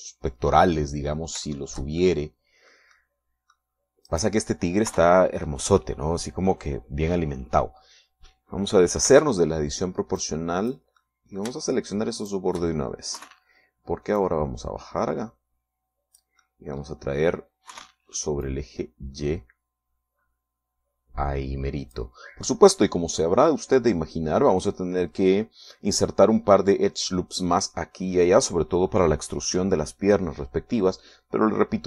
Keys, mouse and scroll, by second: 2.7 shift+middle click, 3.5-5.3 middle drag, 5.3 right click, 5.6 middle click, 6.1 KP_3, 10.3 o, 11.4 click, 12.2-14.3 middle drag, 14.4 KP_3, 15.4-17.6 drag, 18.2-19.7 middle drag, 18.9 KP_3, 19.7-23.4 drag.